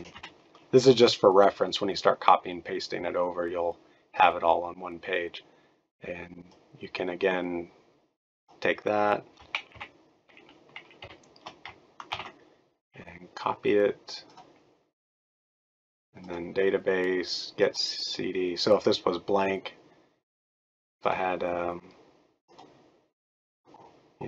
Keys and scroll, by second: 0.0-0.4 typing, 9.7 shift+Up, 11.0 shift+End, 12.1 ctrl+c.